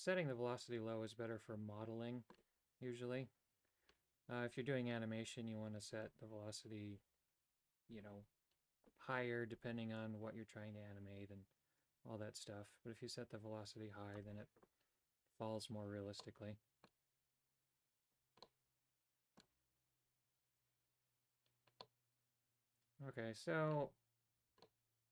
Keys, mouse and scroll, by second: 10.1-14.2 drag, 16.4 middle click, 18.6-19.7 middle drag, 22.0-23.9 middle drag, 24.8 middle click.